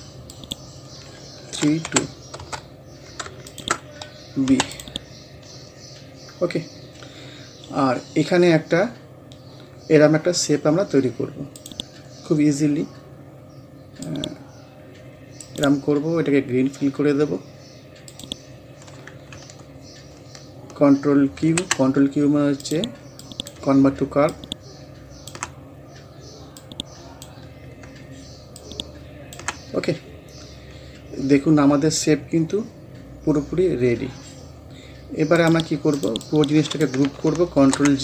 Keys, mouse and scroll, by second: 0.0-0.3 scroll up 1, 0.3 click, 1.5-1.9 typing, 2.4 Return, 3.5 shift+click, 4.5 b, 4.8 click, 5.2 scroll up 1, 6.4 scroll down 1, 11.6 click, 12.0 scroll up 1, 14.1-15.4 drag, 15.4 right click, 18.1 click, 19.2 scroll up 2, 21.1 scroll up 1, 21.4 ctrl+q, 22.6 click, 25.5 scroll down 1, 26.6 click, 27.5 scroll up 1, 28.6 ctrl+click, 28.6 ctrl+click, 29.7 scroll down 1, 31.0 scroll up 1, 35.4-37.6 drag, 37.6 ctrl+g.